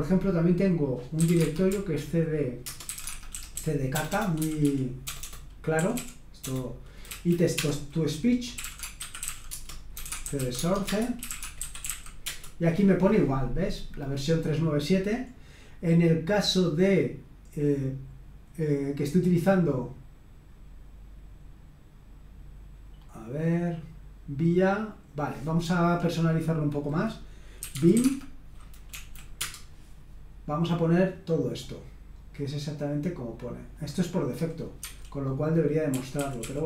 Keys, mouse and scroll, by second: 0.9-12.5 typing, 15.2-15.8 scroll up 1, 15.8-16.8 scroll up 1, 16.8-23.0 scroll up 1, 23.0-25.6 scroll up 1, 25.6 click, 27.3-29.4 typing, 31.6-32.7 drag, 32.7 middle click, 33.8-35.0 drag, 34.8 Escape, 35.6-36.6 typing.